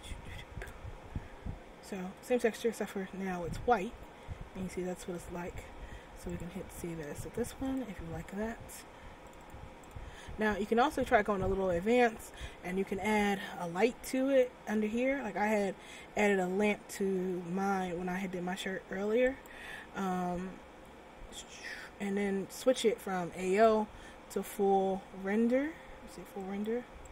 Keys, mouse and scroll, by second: 2.2 Tab, 3.9 scroll down 1, 4.4 middle click, 6.4 click, 10.7 click, 14.3 shift+click, 15.2 scroll down 2, 15.5 middle click, 16.4 scroll up 1, 17.2 scroll down 1, 17.4 middle click, 19.4 right click, 23.6 click.